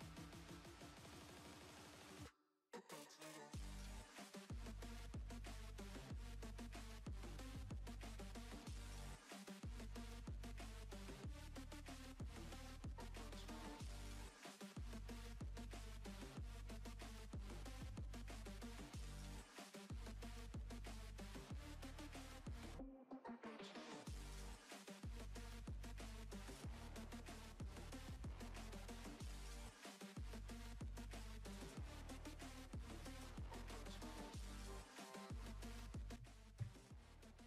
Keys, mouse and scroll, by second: 0.0 middle click, 1.0 click, 2.1 right click, 2.7 KP_1, 3.6 r, 4.3 r, 5.0 Tab, 7.3 middle click, 8.2 middle click, 8.8 s, 9.5 Tab, 10.1 e, 10.6 r, 11.9 right click, 12.4-14.0 drag, 14.1 click, 18.3 click, 19.5 middle click, 20.1-21.3 middle drag, 24.3-25.3 middle drag, 25.3 click, 25.5 middle click, 26.9 click, 27.1 right click, 27.2 middle click, 27.8 click, 28.4 right click, 28.5 click, 29.7 click, 29.8 middle click, 30.3 ctrl+z, 30.4 ctrl+z, 31.1 ctrl+z, 32.0 middle click, 32.3-34.8 drag, 34.8 middle click, 35.4 Tab, 35.7 Tab, 36.0 z.